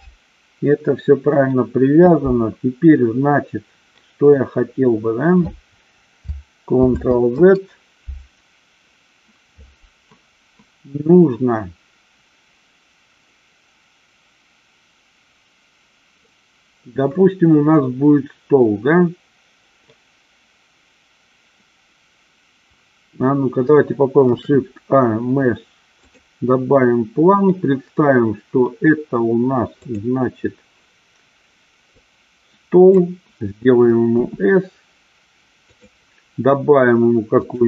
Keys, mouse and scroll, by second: 7.0 ctrl+z, 24.5 shift+a, 29.9 click, 32.1-33.1 drag, 34.2 s, 35.7 click.